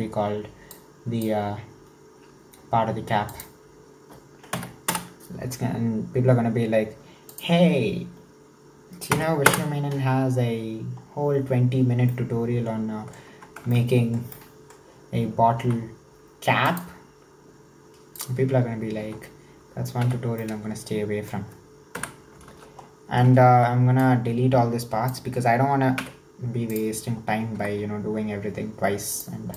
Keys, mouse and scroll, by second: 0.7 click, 3.3-7.0 drag, 7.3-11.5 drag, 12.1-13.3 middle drag, 13.3 Tab, 13.7-16.9 shift+middle drag, 16.9 Tab, 17.0-19.1 drag, 19.1 Tab, 20.0 2, 20.4-22.0 middle drag, 22.0 KP_1, 22.5 alt+z, 23.5 1, 24.1 click, 26.0 x, 27.6 Tab, 29.1-29.5 drag.